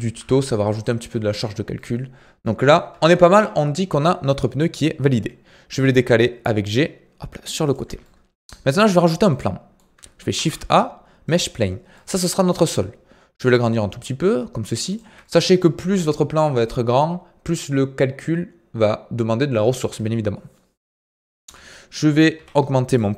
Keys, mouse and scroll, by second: 2.9 KP_1, 3.2 KP_3, 3.7 scroll down 4, 5.7 g, 8.0-10.3 middle drag, 10.3 shift+a, 11.9-12.5 middle drag, 12.5 s, 15.2-21.4 middle drag, 21.4 KP_1, 22.3 KP_3, 22.8 click.